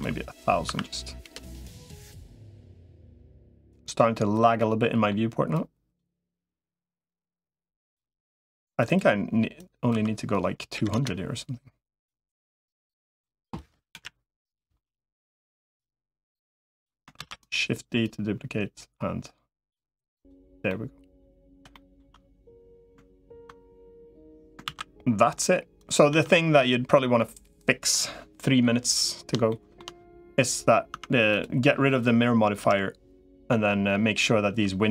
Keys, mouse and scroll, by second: 1.4 middle click, 2.8 click, 3.5 middle click, 4.4 middle click, 5.4 click, 6.6-7.8 drag, 8.6-11.0 drag, 12.0-13.2 drag, 13.8 KP_1, 15.6-16.8 drag, 17.4 shift+d, 17.8-19.6 drag, 20.6 middle click, 21.5 shift+middle click, 24.6 ctrl+s, 26.0 Tab, 29.3 shift+middle click, 30.8 Tab, 31.4 click, 32.4 KP_Decimal.